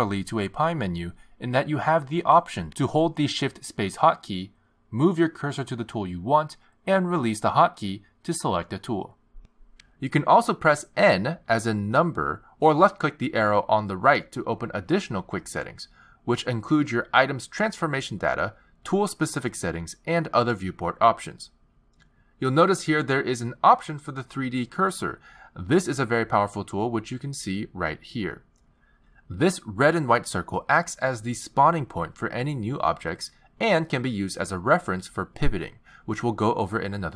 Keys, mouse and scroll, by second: 0.8 shift+space, 5.2 shift+space, 7.6 shift+space, 10.1 shift+space, 12.9 n, 14.4 n, 16.1 click, 19.5 click, 20.6 click, 22.3-23.6 scroll down 2, 23.6 scroll down 1, 26.7 click, 31.9 click, 34.0 shift+a.